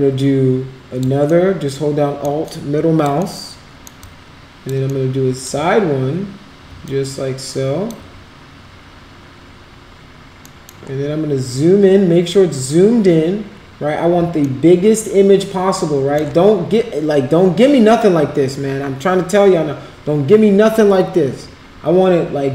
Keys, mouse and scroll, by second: 1.3 alt+middle click, 2.5 alt+click, 3.3 alt+middle click, 4.0 alt+click, 5.0 alt+middle click, 6.9-7.9 alt+drag, 10.4 middle click, 14.4-16.2 alt+middle drag.